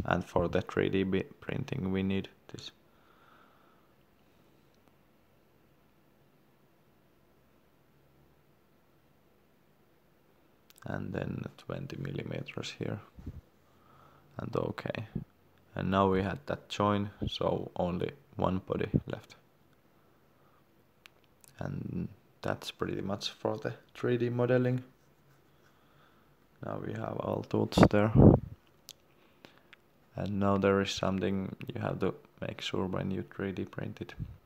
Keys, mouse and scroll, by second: 0.9 shift+middle click, 3.5 click, 21.9 middle click, 22.5 shift+middle click, 24.7 scroll down 1, 25.8 scroll down 1, 26.7 shift+middle click, 27.7 scroll up 1, 28.8 scroll up 1, 31.3 click.